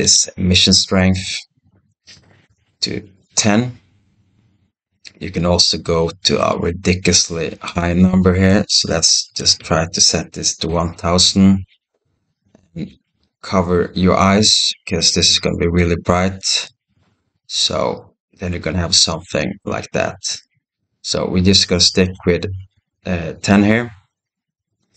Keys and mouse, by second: 7.6-12.5 drag, 8.5 BackSpace, 9.4 0, 12.5-16.5 right drag, 20.5 ctrl+z, 21.2 middle click, 21.4 click, 22.0-23.5 middle drag, 23.5-24.9 drag.